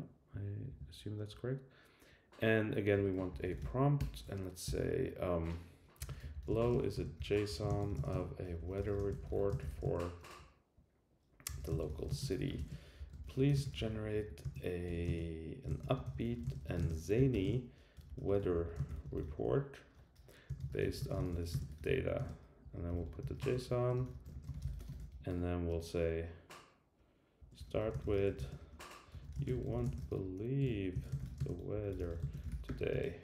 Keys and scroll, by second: 0.7 super+w, 2.9 Return, 4.2 Right, 22.6 shift+Return, 25.3 shift+Return.